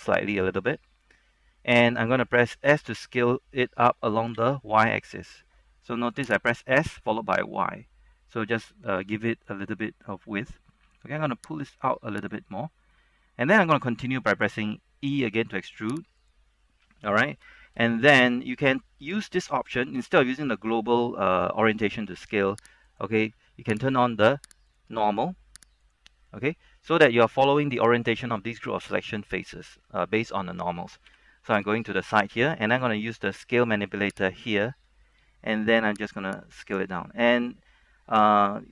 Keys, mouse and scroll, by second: 0.3 click, 2.8 s, 4.5 y, 6.5 click, 8.0 scroll down 1, 8.3 middle click, 10.4 scroll down 1, 10.6 middle click, 11.6 click, 12.7 middle click, 13.5-15.4 scroll up 1, 15.4 e, 16.3 click, 16.8-17.3 scroll down 1, 17.3 shift+middle click, 17.7 scroll up 1, 17.9 shift+middle click, 23.0 click, 26.5-31.1 middle drag, 31.3 KP_3, 31.8 shift+middle click, 32.3-34.5 scroll up 1, 34.5 click, 36.2 shift+middle click, 36.9 click.